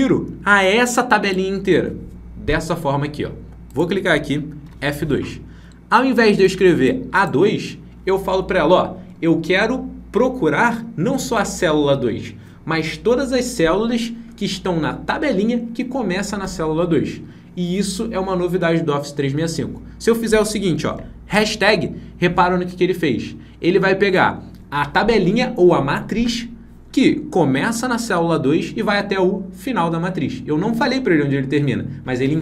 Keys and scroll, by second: 4.5 F2.